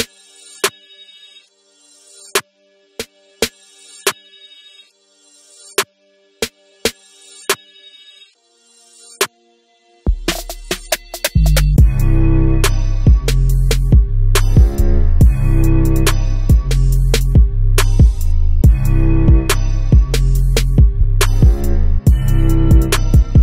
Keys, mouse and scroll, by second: 0.0-1.6 middle drag, 0.7 shift+z, 1.6 click, 2.0-5.7 middle drag, 4.5 KP_7, 5.0 shift+z, 5.7 shift+right click, 6.8 shift+a, 7.1 s, 8.2 click, 8.4-13.2 middle drag, 9.2 KP_Decimal, 9.6 scroll down 1, 11.1 shift+z, 12.2 g, 13.2 click, 15.6 Tab, 15.8 click, 17.0 e, 18.0 click, 18.2 s, 18.9 e, 19.6 click, 19.7 s, 21.0 click, 21.3 Tab, 21.6-23.4 middle drag, 21.9-22.3 scroll down 2, 22.8 s.